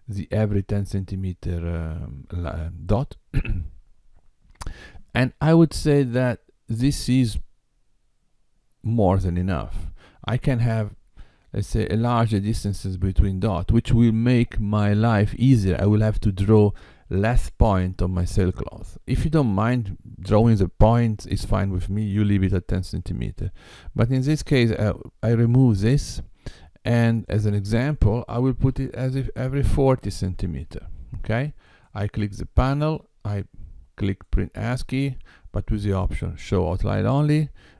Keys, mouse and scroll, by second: 0.9 scroll down 1, 3.3-6.4 scroll down 1, 24.6 x, 27.2 click, 31.6 click, 34.0 click.